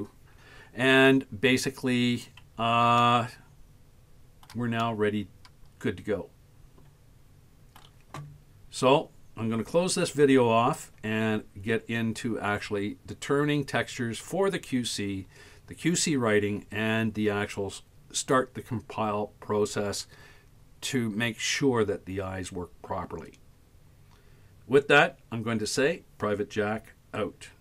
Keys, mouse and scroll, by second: 1.5 scroll down 5, 3.0-4.5 shift+middle drag, 4.8-7.8 middle drag.